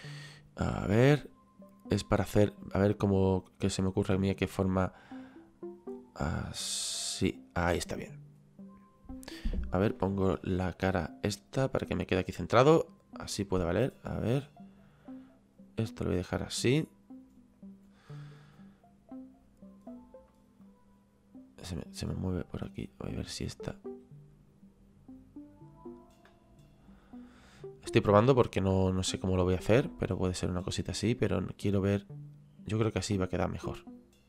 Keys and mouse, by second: 3.0 click, 10.0 KP_1, 14.4 click, 18.4 click, 20.6 click, 23.6 click.